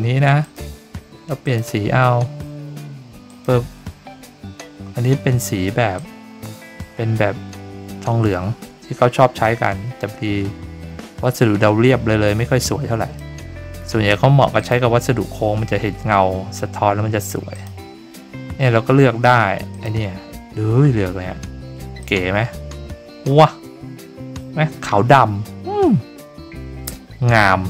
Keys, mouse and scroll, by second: 0.4 click, 1.4 click, 3.2 click, 5.9-13.1 drag, 14.5 click, 17.5 click, 19.7 click, 22.0-27.6 drag.